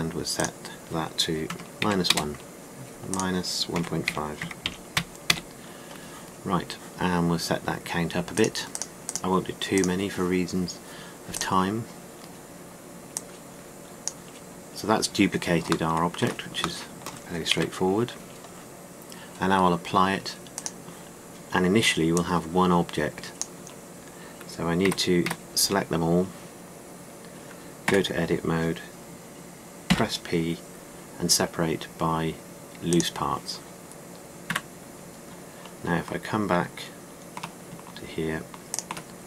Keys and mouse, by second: 18.4 KP_1, 25.7 a, 26.1 a, 28.7 Tab, 30.7 p, 35.3 Tab.